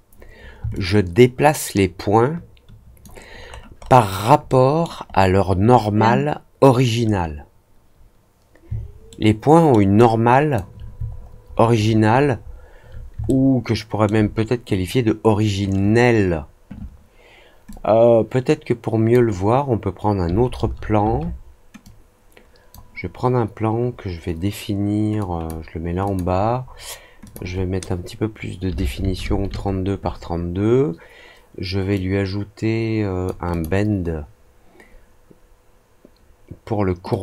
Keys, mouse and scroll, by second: 0.7-3.0 alt+drag, 3.4-3.9 alt+scroll up 2, 4.4-4.8 alt+middle drag, 5.0-5.8 alt+scroll up 2, 9.0 alt+middle click, 9.9 alt+click, 11.0 alt+scroll down 1, 11.4-12.6 alt+scroll up 4, 13.2-14.0 alt+middle drag, 17.6-19.0 drag, 21.8-22.6 drag, 25.1 click, 26.0 click, 27.2 click, 31.9-33.2 drag, 33.4 click, 37.0 click.